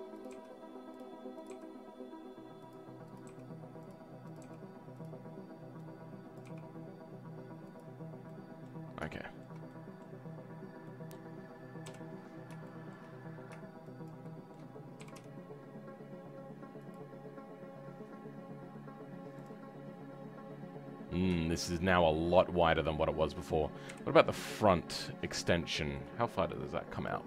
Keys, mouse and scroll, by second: 0.2 click, 1.4 click, 1.5 g, 4.3 click, 4.4 g, 8.2 middle click, 8.8 scroll down 3, 9.1-12.3 shift+middle drag, 12.3 scroll up 1, 12.6 shift+middle click, 13.1-14.0 scroll up 2, 14.0 shift+click, 14.2 shift+middle click, 15.0 g, 17.5-19.3 scroll down 3, 19.3 click, 19.7-21.1 scroll up 3, 21.1-21.4 scroll down 2, 21.4 shift+middle click, 22.2-23.8 scroll up 2, 23.8 KP_1, 24.9 KP_3, 25.6-26.9 shift+middle drag, 26.9 click.